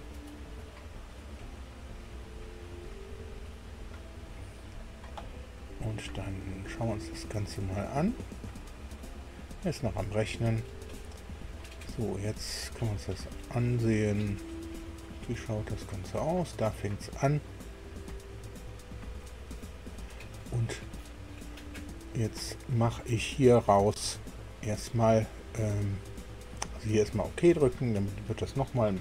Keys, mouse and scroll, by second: 5.6 click, 6.5 click, 7.7 click, 9.0 scroll down 1, 9.3 scroll up 2, 11.3-14.5 drag, 14.8-17.8 drag, 19.2-20.2 drag, 20.5-21.7 middle drag, 22.2 middle click, 23.3 shift+middle click, 24.0 shift+middle click, 27.4 click.